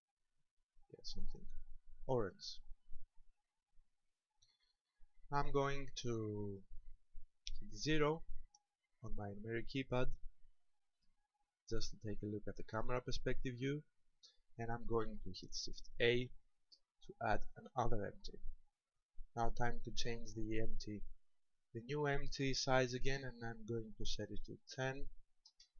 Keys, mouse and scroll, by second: 7.8 KP_0, 10.5-11.1 scroll down 2, 12.9 scroll up 1, 15.9 shift+a, 20.5 click, 22.9 click.